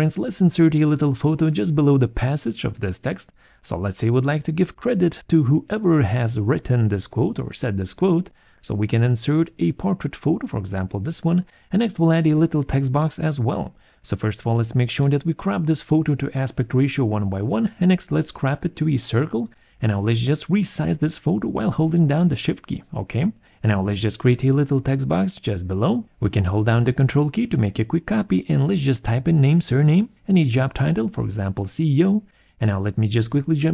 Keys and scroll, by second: 2.7 alt+2, 5.1-6.4 typing, 27.5-29.1 typing, 29.7 Return, 30.3 shift+c, 30.4 shift+e, 31.1 shift+o, 31.5 ctrl+a.